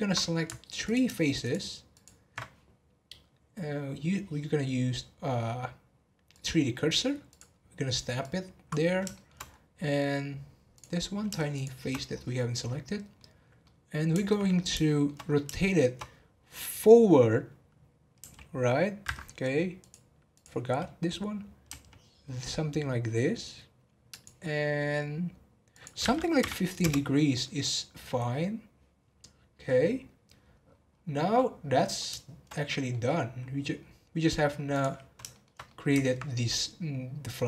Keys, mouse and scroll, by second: 0.8 alt+click, 1.4 alt+shift+click, 1.9 alt+shift+click, 6.3-7.3 drag, 8.2 click, 9.1 shift+middle click, 9.4-10.7 scroll up 4, 10.7 click, 12.1-12.8 scroll down 10, 12.8-14.4 middle drag, 14.4-15.4 scroll up 5, 14.8 shift+middle click, 15.5-18.1 shift+middle drag, 18.1 r, 19.8-21.7 drag, 21.7 r, 25.7-28.7 drag, 30.4 scroll down 3, 31.2-33.0 middle drag, 33.0-33.7 scroll up 5, 33.7-34.7 scroll down 1, 34.7 click, 35.2-37.4 shift+middle drag.